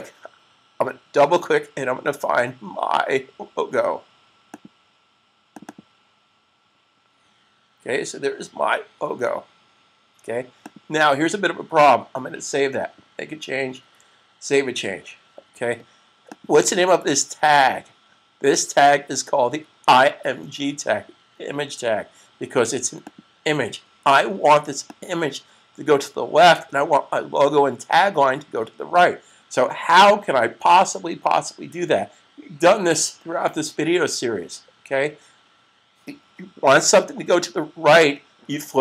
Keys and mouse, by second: 4.4 click, 5.5 double click, 10.4 click, 13.6 super+s, 16.5 click, 22.9 click.